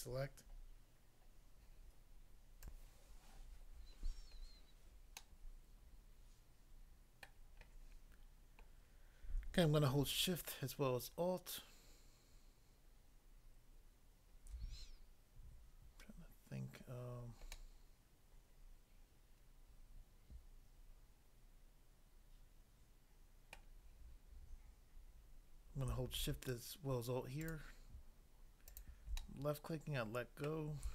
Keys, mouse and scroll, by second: 2.6 click, 3.9 click, 4.0 scroll down 1, 5.1 middle click, 7.3 middle click, 17.5 middle click, 23.5 middle click, 27.3 alt+click, 27.5 alt+click, 28.7 alt+click, 28.8 alt+click, 29.1 middle click, 30.5 middle click.